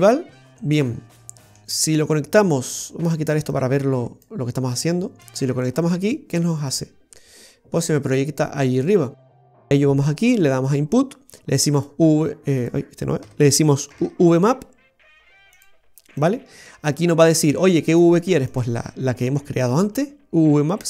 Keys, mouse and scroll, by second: 0.4 click, 0.7 scroll down 2, 0.9 middle click, 2.9 click, 3.6 click, 5.3 click, 13.3 Delete, 14.0 shift+a.